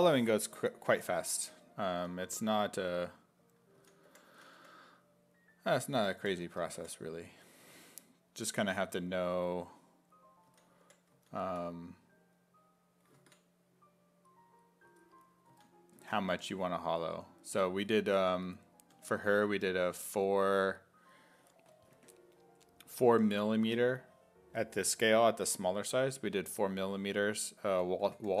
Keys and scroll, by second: 1.9 s, 3.6-5.1 typing, 6.2 5, 6.8 5, 8.8 s, 10.3-12.0 typing, 14.9-16.9 typing, 27.5-28.4 typing.